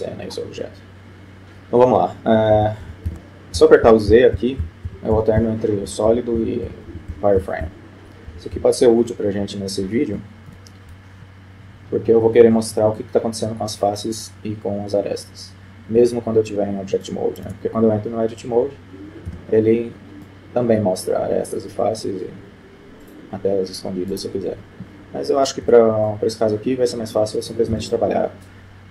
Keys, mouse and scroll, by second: 0.3 scroll down 1, 0.3-1.8 scroll up 1, 1.8 middle click, 2.6-8.6 typing, 11.3 F12, 16.2-17.4 middle drag, 17.6 Tab, 19.4 a, 20.4-21.9 middle drag, 23.1-25.5 drag, 25.9 Tab, 26.2-27.6 middle drag, 27.6 middle click, 27.9 z.